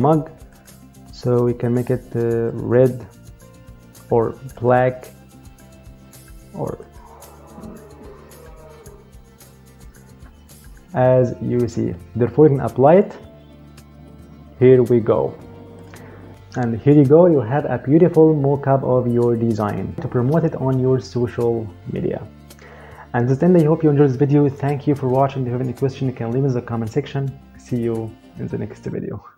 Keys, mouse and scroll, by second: 0.3 click, 2.2 click, 4.3 click, 6.6 click, 12.6 click, 15.5 click.